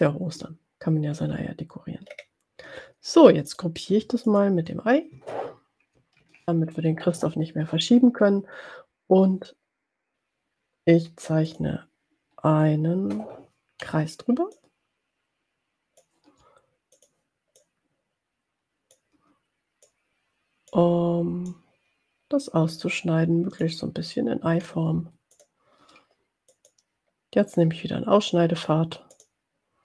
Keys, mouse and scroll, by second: 1.2-1.9 ctrl+scroll down 2, 2.1 ctrl+scroll up 2, 3.4 click, 4.3 shift+click, 6.2 ctrl+g, 11.5 click, 14.5-16.4 shift+drag, 17.3 click, 17.6-19.4 drag, 19.8 click, 21.6-22.9 drag, 23.7 click, 26.6 click, 29.1 click.